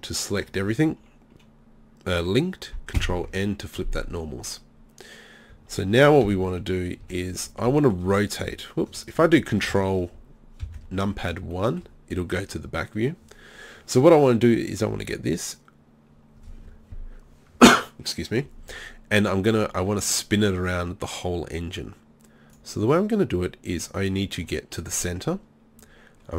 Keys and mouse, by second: 3.0 ctrl+n, 3.8 z, 4.1 z, 6.3 KP_3, 7.0 KP_1, 10.8 ctrl+KP_1, 22.5-25.1 drag, 24.0-26.3 right drag.